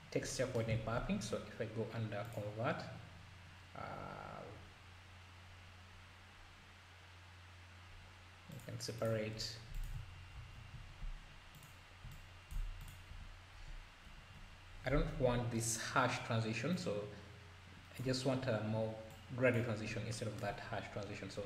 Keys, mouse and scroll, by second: 0.7 shift+a, 9.4 scroll up 2, 9.8 shift+click, 10.3 ctrl+t, 11.5 click, 12.1 alt+click, 13.1 =, 14.0 Insert, 14.3 Delete, 16.7-21.4 drag, 19.9 scroll down 1, 20.9-21.3 scroll up 2.